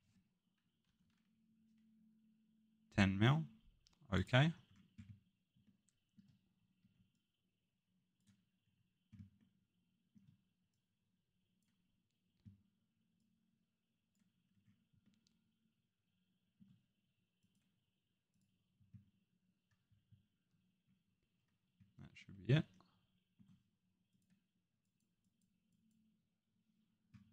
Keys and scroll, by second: 0.8 0, 6.8 Escape.